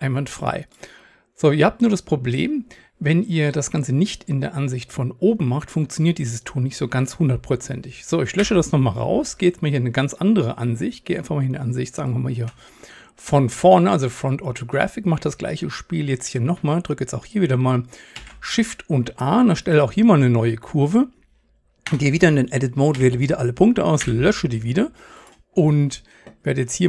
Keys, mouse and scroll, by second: 8.4 Delete, 10.5-16.6 drag, 18.2 shift+a, 21.9 Tab, 23.0 a, 24.0 Delete, 26.1 click.